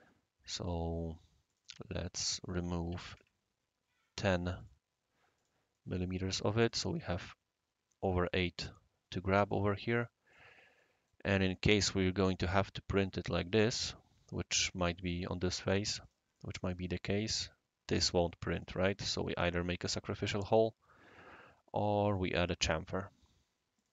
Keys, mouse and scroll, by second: 0.6 click, 1.5 click, 1.8-3.3 typing, 2.1 click, 4.6 click, 5.3-6.1 typing, 5.3 click, 6.4 right click, 9.5-10.4 right drag, 10.8-11.1 middle drag, 11.3-11.9 right drag, 11.5-11.9 middle drag, 13.2 click, 16.0 click, 16.3 middle click, 16.3-17.1 right drag, 16.4 click, 18.0 click, 18.5 click, 19.1 click, 19.8 click, 20.4 click, 22.0 click, 23.7 click.